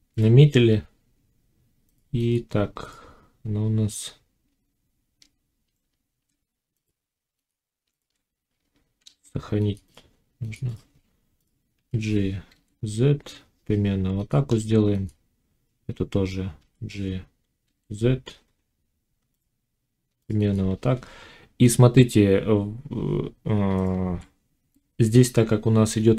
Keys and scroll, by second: 5.6 Tab, 7.8 Tab, 9.0 ctrl+s, 11.7 g, 16.5 g, 23.6 z.